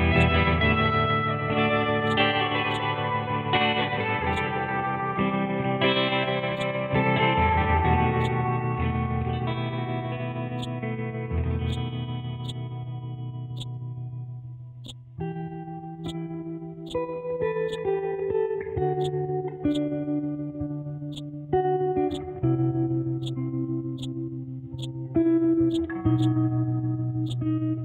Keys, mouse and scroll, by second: 0.1 click, 1.2 ctrl+z, 2.0-5.8 drag, 5.8 scroll up 1, 6.5-8.2 drag, 8.2-9.6 drag, 9.6 scroll down 1, 10.6-14.8 drag, 19.0 click.